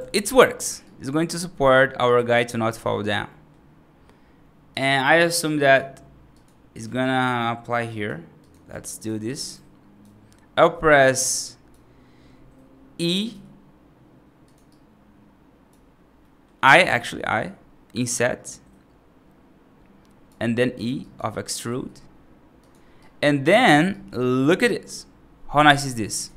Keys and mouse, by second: 0.7 right click, 1.9 right click, 2.2 right click, 3.1 middle click, 4.6 click, 5.1 right click, 5.5 click, 6.9 shift+click, 7.8 right click, 8.3 click, 9.1 right click, 10.4-11.6 right drag, 13.2 i, 14.5-15.6 right drag, 16.1 middle click, 16.5 right click, 16.9 middle click, 18.0-20.1 right drag, 20.6 right click, 20.9 right click, 21.5 e, 22.9 right click, 23.5 middle click, 23.8 right click, 24.4 middle click, 26.1 ctrl+z.